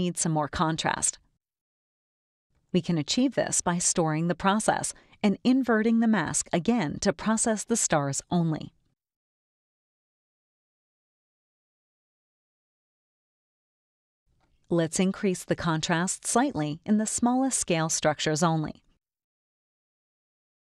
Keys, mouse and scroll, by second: 0.7 click, 4.6 click, 7.8 click, 8.7 click, 10.2 click, 11.0 click, 12.6 click, 14.5 click, 16.2 click, 18.1 click, 18.6 KP_1, 18.8 KP_5, 19.3 KP_Enter.